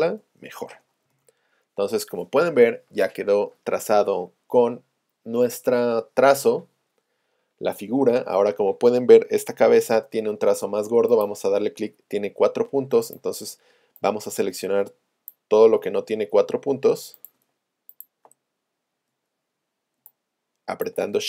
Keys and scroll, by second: 9.5 v.